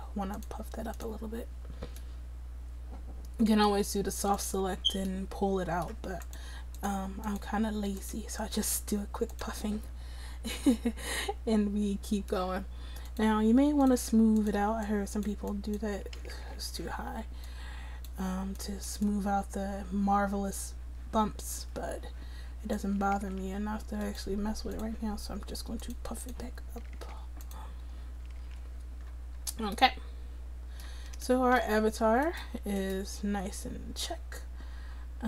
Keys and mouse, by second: 16.3 ctrl+z, 16.5 ctrl+z, 23.2 ctrl+z, 27.0 ctrl+z, 28.4 ctrl+z, 32.3-34.9 drag.